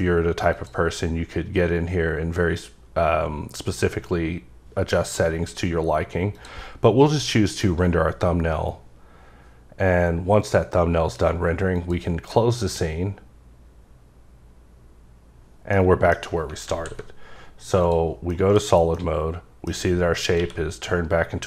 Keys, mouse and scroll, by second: 0.5 click, 6.3 click, 11.7 click, 15.7 middle click, 16.6 alt+z, 17.8 click, 18.3 middle click, 18.9 middle click, 20.4 q.